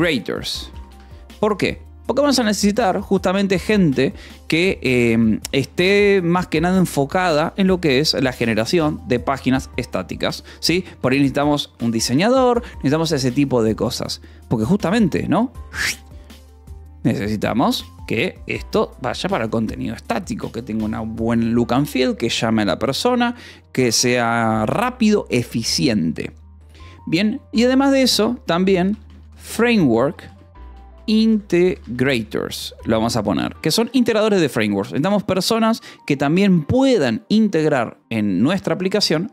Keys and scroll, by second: 0.0-0.4 typing, 0.8 Escape, 5.0 a, 5.6 space, 11.0 Escape, 11.6 o, 12.2 :, 12.4 space, 28.7-33.3 typing, 33.7 Escape, 37.9 a, 38.3 space, 38.6 =, 38.8 space.